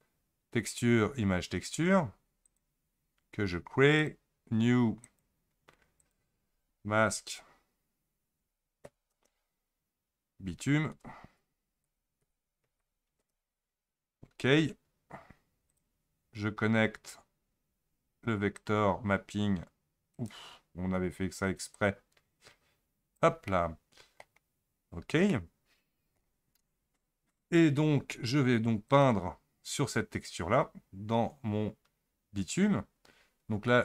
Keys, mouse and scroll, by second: 5.1-8.2 drag, 16.9-17.5 scroll up 1, 17.5-18.6 scroll up 4, 18.6 drag, 21.8 click, 23.5 middle click, 24.4-25.3 scroll down 11, 25.3-26.5 middle drag, 26.5-26.8 scroll up 1, 28.9 click.